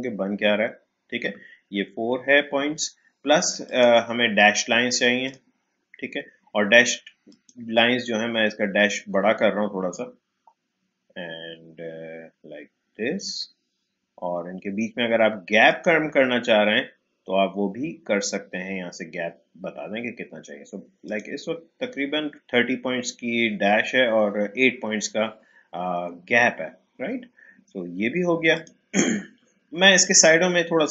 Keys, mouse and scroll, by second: 3.6 click, 8.0-15.7 scroll up 1, 15.7 click, 16.1-20.2 scroll up 1, 21.0 click, 21.7-23.5 scroll up 1, 28.5 click.